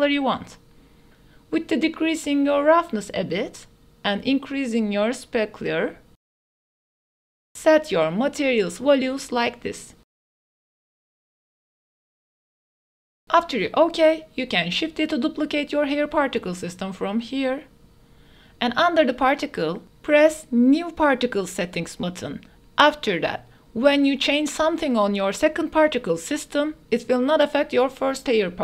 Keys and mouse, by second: 4.1 click, 4.9 click, 6.1 click, 7.0 click, 8.4-13.1 drag, 13.2 ctrl+s, 14.2 shift+d, 14.8 x, 22.0-28.6 drag.